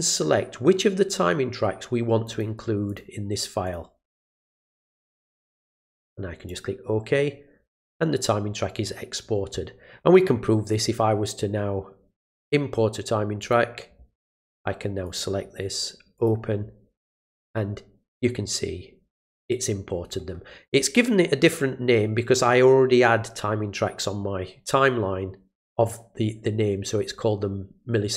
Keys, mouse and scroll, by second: 2.2 click, 2.9 click, 3.6 click, 4.1 click, 4.5 click, 5.5 click, 6.5 click, 10.7 right click, 13.4 click, 15.0 click, 16.1 click.